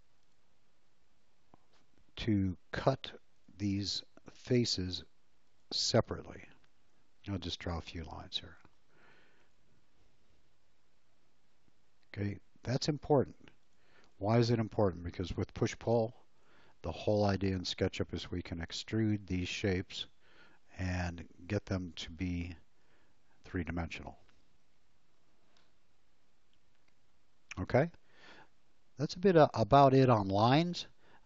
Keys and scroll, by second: 5.9 space, 7.1 l, 8.7 space, 15.7 p, 25.1 space.